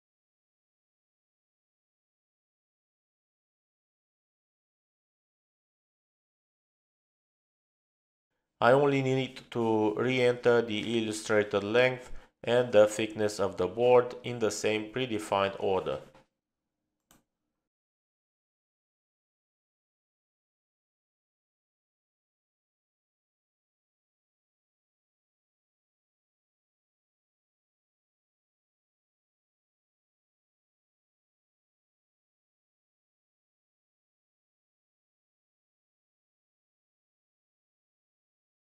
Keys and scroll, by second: 17.6-18.8 typing, 19.1 Return, 20.5-21.9 typing, 23.0-23.7 typing, 26.5 p.